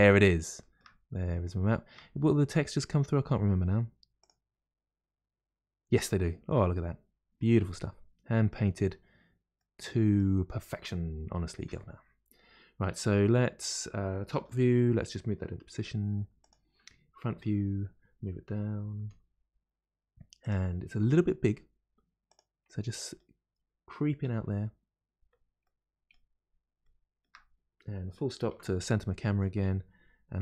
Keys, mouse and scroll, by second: 1.0 scroll up 2, 1.7-4.6 shift+middle drag, 4.6 click, 6.0-9.0 middle drag, 9.6-11.6 middle drag, 11.6 scroll down 1, 14.4 KP_7, 14.5 KP_7, 15.8 g, 17.3 KP_1, 17.4 KP_1, 19.0 g, 19.0 g, 22.6-24.3 middle drag, 24.3 KP_1, 24.4 KP_1, 25.6 middle click, 26.4-26.8 scroll up 6, 26.8-28.4 shift+middle drag, 28.4 KP_Decimal, 28.7 KP_Decimal, 29.0-30.4 middle drag.